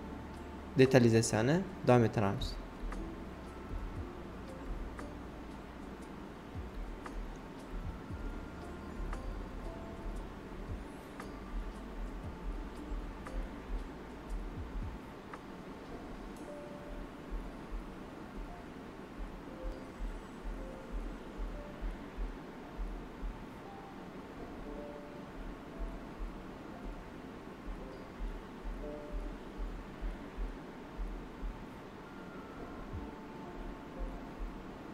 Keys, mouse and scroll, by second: 0.0-1.1 typing, 1.2 alt+right click, 1.9 click, 2.6 ctrl+z, 3.2 space, 3.4 click, 3.8 space, 4.6 click, 6.4-8.4 shift+drag, 8.4 shift+d, 9.1-11.7 shift+drag, 11.7-15.5 shift+drag, 15.5 alt+right click, 16.8 space, 17.1 click, 17.4 space, 17.6 click, 18.4 d, 19.0 alt+right click, 19.4-21.0 shift+drag, 21.0 alt+right click, 24.3 alt+right click, 24.5 alt+right click, 25.6 alt+right click, 25.8-27.6 typing, 26.8 alt+right click, 27.2 click, 28.1 alt+right click, 32.4-34.0 drag, 34.0-34.9 shift+drag.